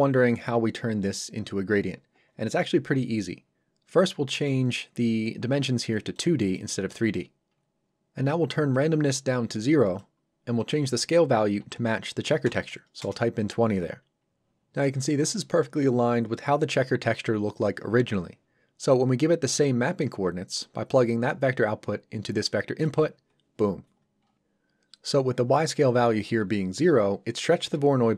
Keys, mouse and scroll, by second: 4.4 click, 8.7 click, 11.6 KP_2, 13.0 Return, 20.6 click.